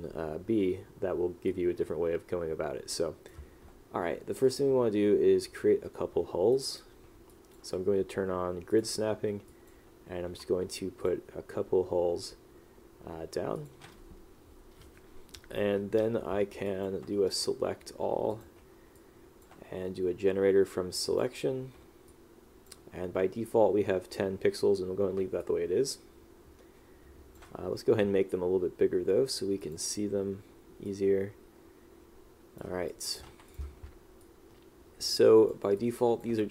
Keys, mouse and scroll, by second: 1.6 click, 6.7 click, 7.4 click, 9.6 click, 11.1 click, 12.0 s, 13.7 click, 16.8 click, 19.1 click, 22.2 click, 25.5 click, 33.0 click, 34.3 click, 35.9 click.